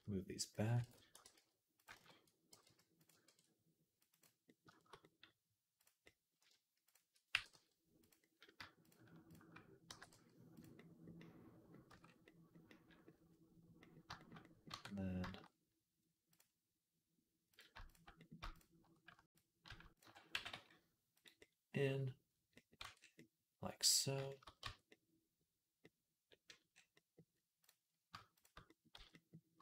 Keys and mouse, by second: 0.7 ctrl+z, 1.0 e, 1.8 ctrl+z, 2.3 g, 2.9-6.7 ctrl+middle drag, 3.1 ctrl+r, 6.7 shift+click, 6.9-8.0 middle drag, 7.1 g, 8.0-13.9 drag, 9.7 g, 11.7 Tab, 13.9-24.3 shift+middle drag, 14.5 Tab, 20.2 g, 22.7 Tab, 24.5 Tab, 24.5-28.7 middle drag, 28.8 z.